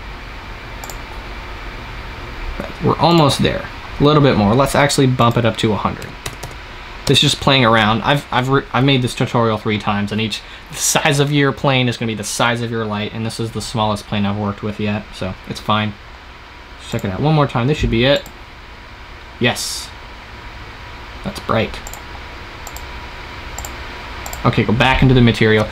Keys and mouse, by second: 1.1-2.8 drag, 5.1-6.3 drag, 6.3 KP_0, 16.8 click, 17.8 click.